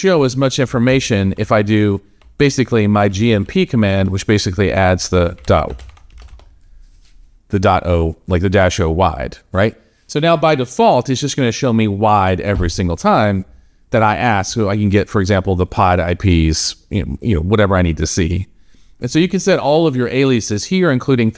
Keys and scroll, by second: 0.7 Up, 1.3 BackSpace, 5.2 Up, 6.0 shift+a.